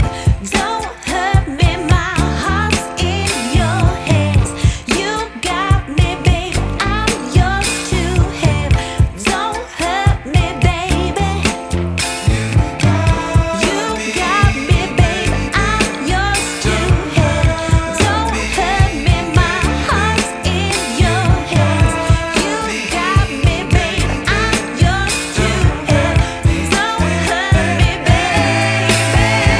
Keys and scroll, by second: 2.9 v, 6.6 super+t, 19.3 shift+super+z, 24.0 space, 27.8 b.